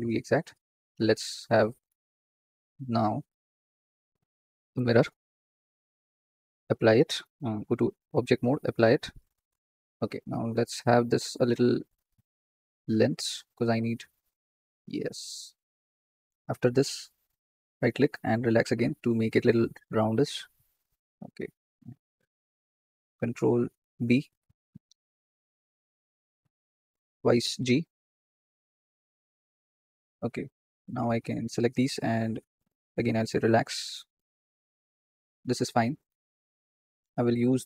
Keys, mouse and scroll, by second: 0.9 click, 1.2-1.7 scroll down 8, 1.7 shift+middle click, 2.0 scroll up 3, 4.0 drag, 5.4-7.2 drag, 7.5 Tab, 8.2-8.9 drag, 8.9 scroll down 3, 10.7 Tab, 11.3 s, 11.9 a, 12.5 s, 16.0 click, 17.7-21.2 right drag, 21.2 click, 23.8 ctrl+b, 27.4 g, 29.7 click, 30.0-30.6 scroll up 2, 30.6 shift+middle click, 31.2 click, 33.1-34.8 right drag, 34.8-35.8 drag, 35.8 shift+middle click, 36.2-37.6 scroll up 6.